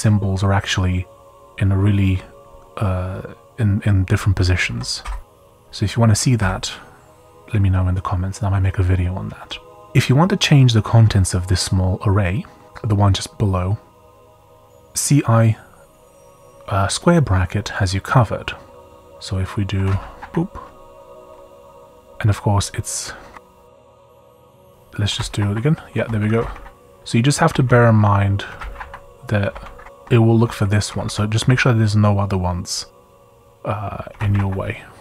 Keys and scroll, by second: 4.7 j, 5.0 j, 5.3 j, 6.4 j, 12.6 typing, 19.5-21.6 typing, 22.6 typing, 23.7 Page_Down, 24.0-26.0 typing, 25.9 Escape, 26.4 Up, 26.5 Up, 27.5 Up, 27.7 Up, 28.2-29.5 typing, 29.4 Escape, 29.8 Down, 29.9 Down, 30.0 Up, 30.5 Left, 30.9 Down, 31.4 Down, 33.9-34.8 typing.